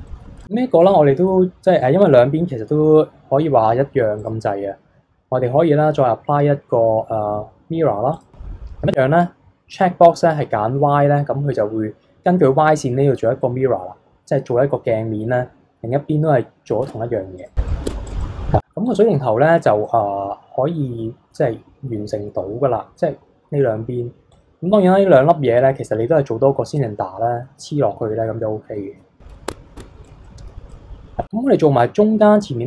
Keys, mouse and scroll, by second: 0.1-0.4 middle drag, 0.4 click, 0.7 KP_1, 1.2 KP_3, 4.2-7.3 drag, 8.9 click, 9.7 click, 13.4-14.3 scroll down 2, 16.8 Tab, 17.4 click, 17.7 middle click, 17.9 Tab, 18.1 click, 18.2-22.8 middle drag, 24.6-26.7 scroll up 2, 26.7-28.6 middle drag, 28.6-28.9 scroll down 2, 28.9 KP_3, 29.5 Tab, 29.8 Tab, 30.1 click, 30.2-30.7 middle drag, 30.7 click.